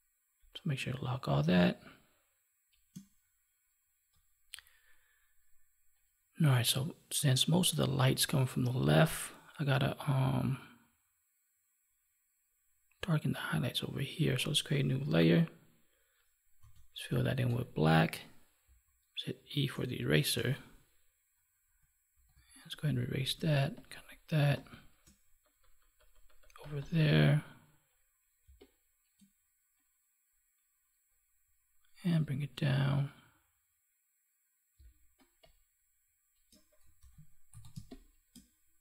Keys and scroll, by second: 1.5 space, 17.4 alt+BackSpace, 24.3 space, 28.4 space, 34.7 space, 36.9 ctrl+s, 37.6 space.